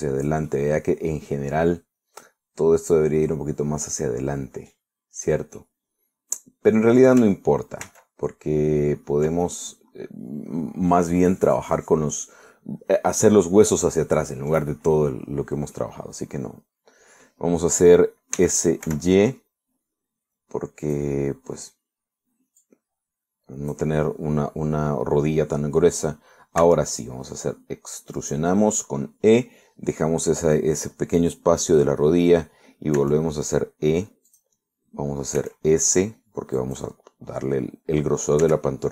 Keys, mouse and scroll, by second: 1.5-6.0 middle drag, 6.0-6.6 scroll down 1, 6.6-8.2 middle drag, 8.9 ctrl+z, 10.5-12.2 ctrl+middle drag, 12.5-12.9 scroll up 2, 16.8-18.5 middle drag, 19.4 s, 19.9 y, 21.9 click, 23.7-25.0 drag, 27.7 e, 29.2 click, 34.0 e, 35.4 click, 36.4 s, 37.6 click.